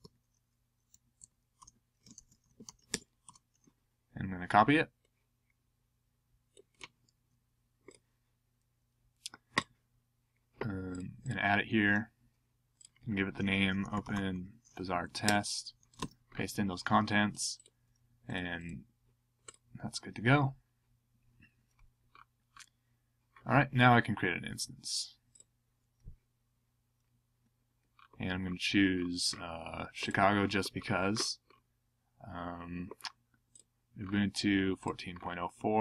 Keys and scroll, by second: 0.0-2.9 typing, 3.2 Return, 13.4-14.6 typing, 14.9 Down, 15.0 Down, 15.2 Tab, 16.0 super+v.